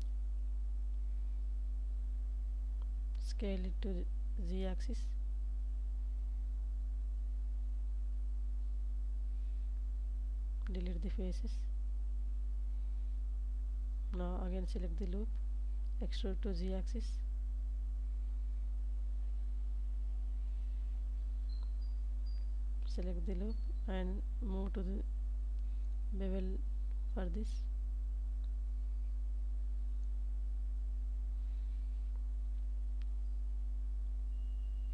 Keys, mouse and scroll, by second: 4.5 shift+click, 5.0 Tab, 5.6 middle click, 6.6 Tab, 7.9 1, 8.8 alt+click, 9.4 x, 11.4 middle click, 13.7 e, 14.3 z, 16.9 click, 17.4 Tab, 18.1 ctrl+s, 18.3 ctrl+s, 18.6 Tab, 20.5 2, 20.9 alt+click, 22.1 ctrl+b, 25.4 shift+click, 26.0 Tab, 26.8 ctrl+s, 27.1 ctrl+s, 27.4 middle click, 28.7 ctrl+z, 29.3 ctrl+s, 32.8 shift+a.